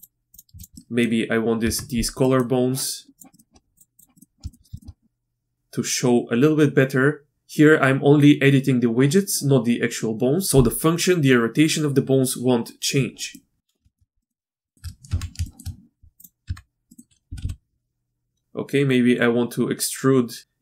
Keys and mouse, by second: 0.0 click, 0.3 click, 0.6 shift+click, 0.8 click, 1.6 Tab, 2.2 middle click, 3.3 middle click, 3.8 click, 4.1 middle click, 4.4 shift+middle click, 4.7 shift+middle click, 5.0-7.3 drag, 13.3-13.7 middle drag, 13.8 shift+middle click, 14.2 middle click, 14.7 shift+middle click, 15.1 Tab, 15.4 shift+middle click, 16.2 click, 16.4 Tab, 16.9 middle click, 17.3 e.